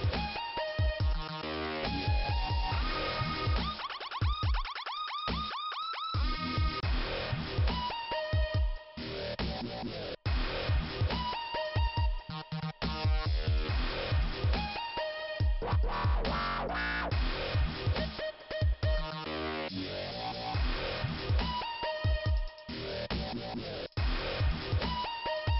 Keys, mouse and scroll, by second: 0.9 click, 2.5 click, 3.0 click, 3.2 click, 3.3 double click, 6.7 scroll up 2, 8.6 click, 10.3 click, 10.6 click, 10.8 click, 10.9 double click, 11.0 double click, 13.3 click, 13.5 click, 13.7 click, 13.8 double click, 13.8 double click, 15.5 click, 16.0 click, 17.8 click, 17.9 click, 19.3 click, 19.7 scroll down 2, 20.8 click, 21.6 click, 23.9 middle click, 24.8-25.2 scroll up 3, 25.0 click, 25.2 click.